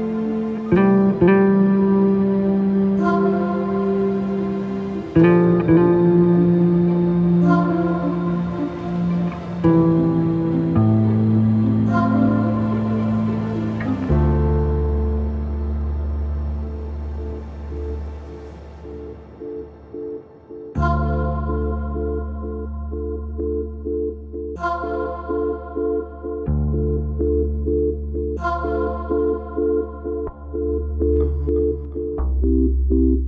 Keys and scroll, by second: 5.0 ctrl+z, 9.0 ctrl+z, 18.2 ctrl+c, 18.5 ctrl+v, 22.8 Delete, 23.7 Delete, 24.1 Delete, 26.7 space, 30.2 ctrl+z.